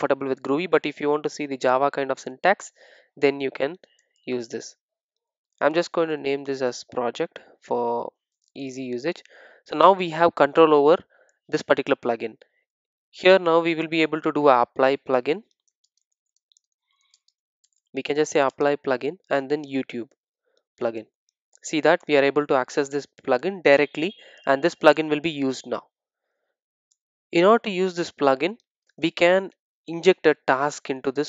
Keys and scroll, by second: 6.7 Return, 22.1 Return.